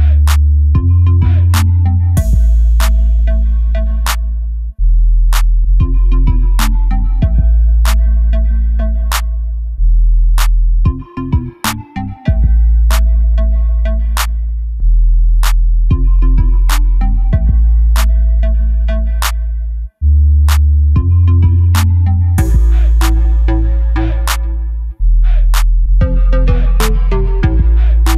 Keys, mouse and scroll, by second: 0.5 shift+right click, 1.0 KP_1, 1.6 KP_2, 1.9 KP_3, 2.4 shift+a, 3.9 s, 5.6 click, 5.8 s, 7.2 click, 7.3 g, 9.6 click, 9.7 KP_7, 10.5 s, 13.2 click, 13.4-16.1 middle drag, 13.8 scroll down 2, 14.2-14.7 scroll up 2, 14.9-15.5 scroll up 2, 15.5 s, 16.1 click, 16.4 s, 17.0 click, 17.4 s, 18.1 click, 18.2 KP_7, 18.7 scroll down 1, 19.3 shift+z, 19.5 scroll up 1, 20.0 g, 20.9 click, 21.1-22.2 middle drag, 22.0 shift+z, 22.2 click, 22.4 middle click, 22.8 click, 23.2 g, 24.4 click, 24.6 scroll down 1, 24.8-28.1 middle drag, 25.3 ctrl+s, 25.8 scroll down 1, 26.3-26.6 scroll down 1.